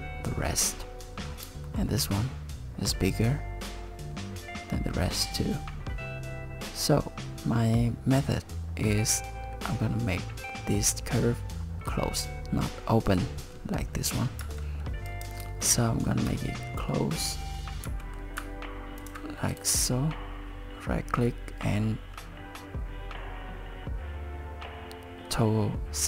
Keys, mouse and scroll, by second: 1.2 scroll down 4, 1.7 shift+middle click, 14.4 Tab, 15.1 click, 15.6 shift+middle click, 17.9 e, 19.0 ctrl+e, 19.5 right click.